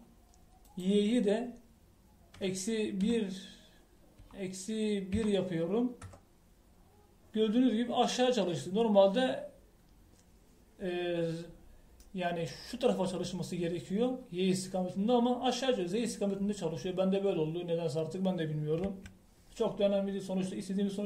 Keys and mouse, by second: 1.6-5.4 drag, 13.0 middle click, 19.8 KP_1.